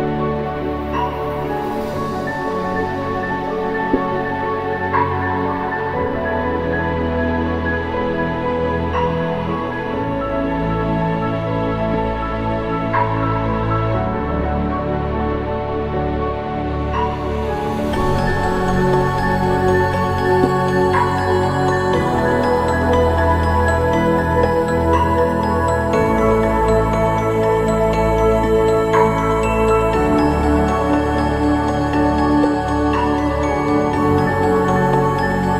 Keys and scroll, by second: 13.4 ctrl+=, 13.7 ctrl+=, 17.5 ctrl+t.